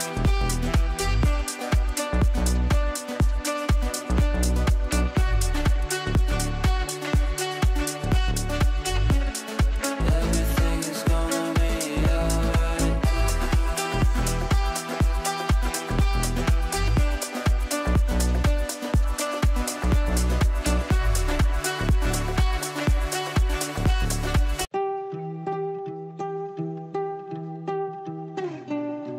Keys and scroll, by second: 9.0 Down, 9.9 f, 21.8 shift+F2, 22.3 shift+Page_Down, 22.8 Escape.